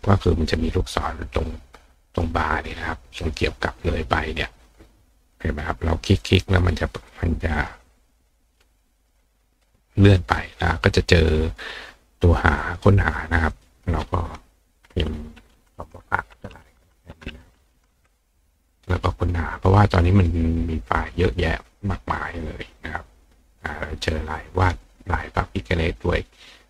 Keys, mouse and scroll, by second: 2.0 click, 3.2 click, 5.3 click, 7.1 click, 7.5 click, 8.9 click, 9.5 click, 12.6 click, 13.5 click, 19.7-21.0 scroll down 2, 22.2-23.5 scroll down 2.